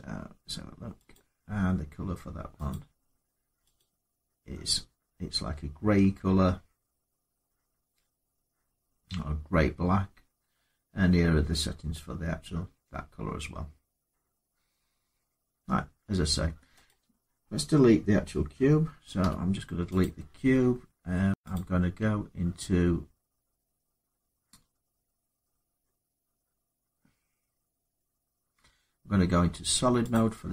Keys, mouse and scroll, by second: 0.7 scroll, 0.9 click, 2.5 click, 3.6 click, 5.1 scroll down 2, 5.7 middle click, 11.7 middle click, 11.8 middle click, 16.7 click, 19.0 x, 19.8 click, 21.3 click.